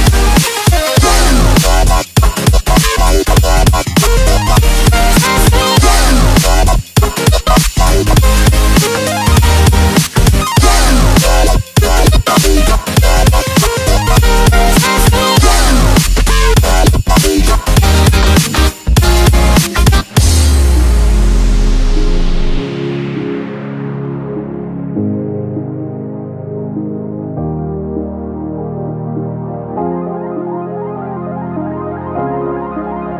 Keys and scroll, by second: 0.2 Delete, 9.5 Delete, 19.2 space, 32.4 ctrl+shift+[.